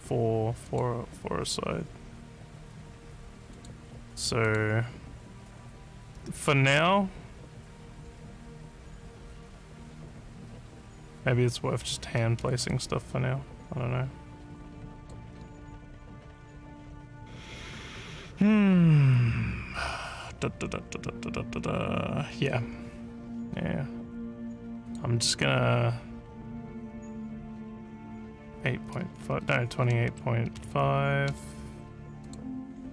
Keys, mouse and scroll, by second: 0.6 click, 3.5 click, 4.4 click, 12.7-15.1 alt+drag, 24.8 click, 29.8 2, 31.3 5, 32.2 click.